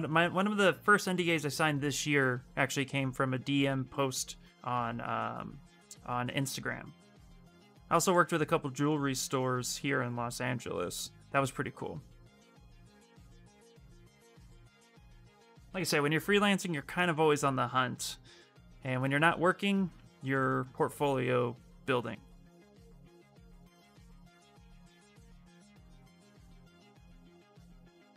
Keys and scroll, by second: 10.7 ctrl+z, 15.4-16.1 typing.